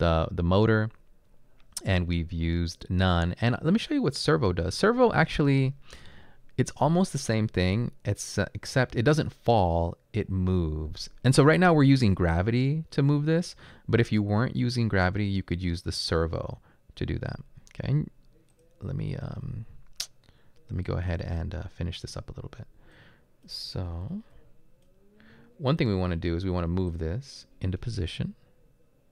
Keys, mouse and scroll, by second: 24.0 e.